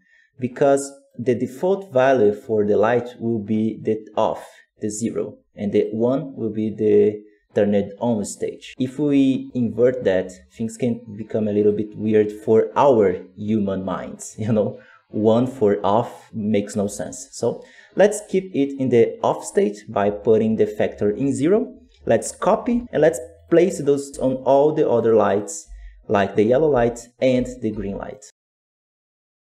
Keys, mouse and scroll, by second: 5.1-17.8 drag, 17.8-19.7 scroll down 6, 23.2 click, 24.1 x, 24.4 right click, 24.9 click, 26.0 g, 26.6 ctrl+v, 28.4 g, 28.6 scroll down 2, 28.7 middle click, 28.7 right click, 28.8 g, 28.9 click.